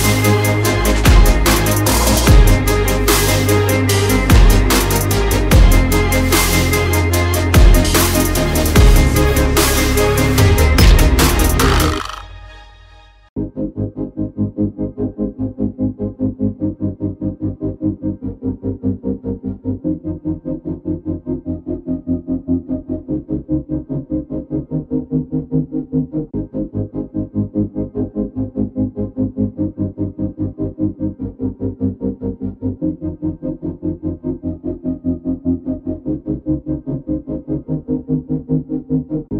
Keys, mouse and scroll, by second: 0.2 click, 0.6 alt+scroll down 1, 0.8 alt+scroll up 1, 1.4 click, 1.7 alt+scroll up 1, 2.5 click, 4.2-6.5 typing, 7.5 click, 8.6 alt+click, 9.5 click, 11.4-14.6 typing, 16.2 alt+scroll up 1, 16.8 alt+click, 17.4 alt+scroll down 2, 17.8 click, 18.1 alt+scroll up 1, 18.3 click, 20.3 p, 20.8 l, 20.9 a, 21.1 y, 21.9 click, 27.0 alt+scroll, 27.0 alt+scroll up 1, 27.3 alt+scroll down 1, 27.6 click, 28.3 alt+scroll down 1, 28.5 alt+scroll up 1, 28.9 alt+click, 29.6 alt+scroll, 29.7 alt+scroll up 1, 30.2 click, 33.0-35.8 typing, 36.3 Return, 37.3-39.3 typing.